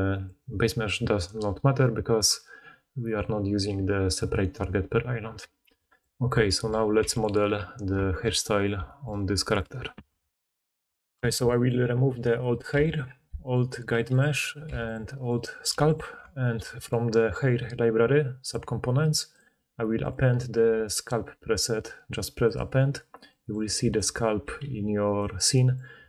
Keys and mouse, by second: 0.2 d, 0.3-6.2 middle drag, 0.3-6.2 right drag, 0.3 d, 1.2 d, 1.4 d, 5.6 b, 7.0 x, 9.5-12.0 drag, 12.4-14.2 drag, 12.7 x, 13.9 g, 14.6 x, 15.2 click, 15.2-18.4 middle drag, 15.7 x, 18.4 click, 23.8 click, 24.0-26.0 drag, 24.4 g.